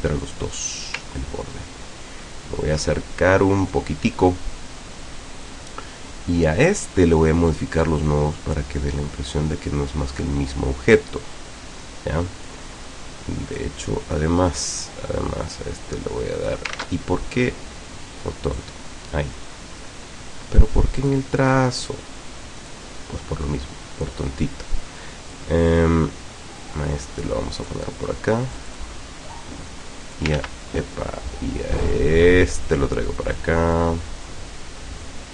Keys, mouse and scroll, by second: 0.3 click, 6.7 click, 7.9-12.7 drag, 13.7 click, 14.7-16.7 drag, 16.8 ctrl+z, 18.5 click, 21.1 click, 21.5 click, 22.7 click, 25.4-27.9 drag, 28.6-30.4 drag, 30.4 ctrl+z, 31.9-35.3 drag.